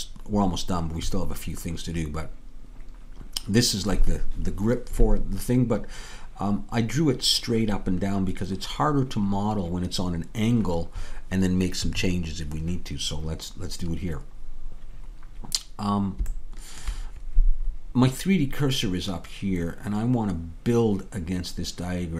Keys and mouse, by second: 16.4-20.4 middle drag.